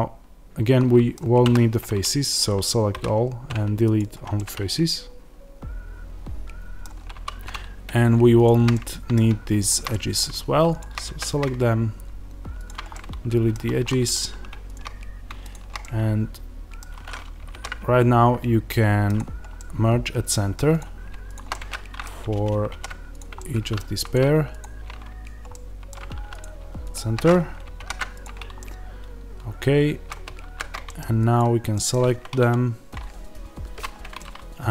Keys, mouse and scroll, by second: 1.3 a, 7.0 2, 7.4 click, 8.6 middle click, 9.6 shift+click, 9.8 middle click, 10.7 shift+click, 12.6 x, 12.8-14.6 middle drag, 13.4 1, 14.6 shift+click, 15.7-20.7 middle drag, 19.0 alt+m, 20.7 click, 21.4-23.9 middle drag, 23.1 alt+m, 23.9 click, 25.2 alt+m, 25.4 middle click, 26.3 click, 28.1 alt+m, 28.5-31.1 middle drag, 30.2 z, 31.1 click, 31.6-34.7 middle drag, 33.7 z.